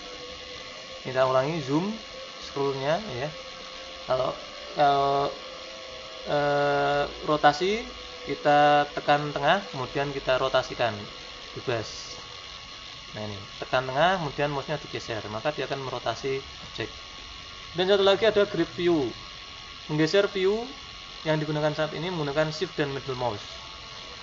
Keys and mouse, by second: 1.0-2.1 middle drag, 3.3-11.0 middle drag, 11.4-15.1 middle drag.